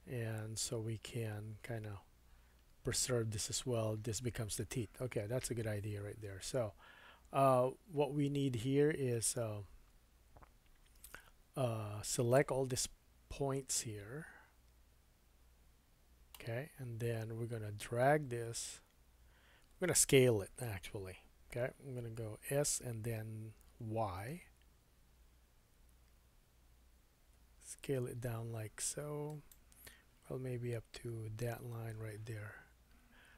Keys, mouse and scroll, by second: 12.3-33.3 drag, 22.5 s.